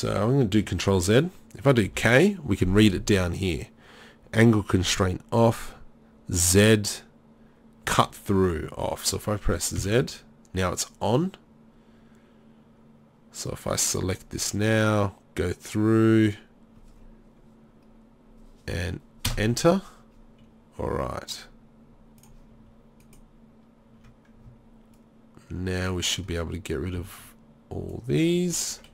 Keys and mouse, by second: 2.6 k, 22.2 click, 23.0-24.5 middle drag, 24.9-28.9 drag.